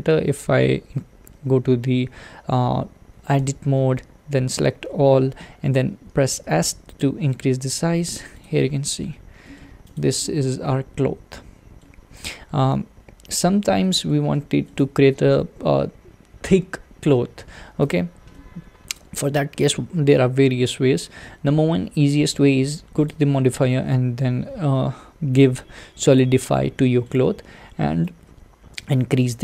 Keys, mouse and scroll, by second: 3.4 Tab, 4.6 a, 6.5 s, 8.4 click, 9.0 Tab, 9.4-9.9 middle drag, 9.9 click, 10.2-12.1 middle drag, 12.1-13.3 scroll up 1, 13.3-13.8 scroll up 1, 13.8-17.9 shift+middle drag, 17.9 click, 18.4-21.4 middle drag, 26.2 click, 26.8-28.5 middle drag, 28.5-29.4 drag.